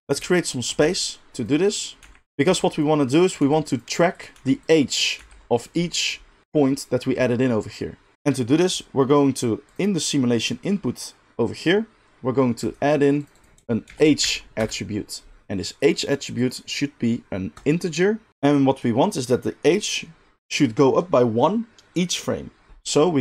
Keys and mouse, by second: 0.8 g, 1.5 middle click, 2.0-5.2 typing, 2.2 click, 2.9-3.2 middle drag, 3.2 click, 3.3 middle click, 4.1 click, 4.8 middle drag, 5.0 click, 5.1-9.7 middle drag, 9.7 click, 9.8-12.7 middle drag, 12.7-13.3 drag, 13.3 middle click, 13.4-23.2 drag.